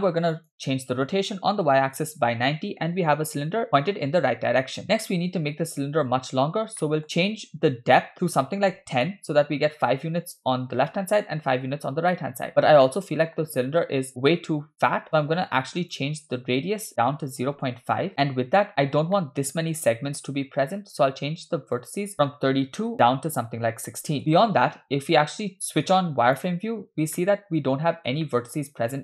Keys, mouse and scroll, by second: 0.3-2.0 drag, 6.5-7.3 scroll up 3, 6.8 middle click, 8.1 click, 10.9-11.3 middle drag, 12.9-13.5 middle drag, 14.2-14.8 scroll up 1, 15.1 scroll up 3, 15.8-17.9 drag, 18.6 middle click, 19.0-19.5 scroll up 4, 19.2 shift+middle drag, 21.8-24.2 drag, 24.2 scroll down 1, 24.3-25.4 middle drag, 26.5 click, 27.2-28.1 middle drag, 28.2-28.6 shift+middle drag.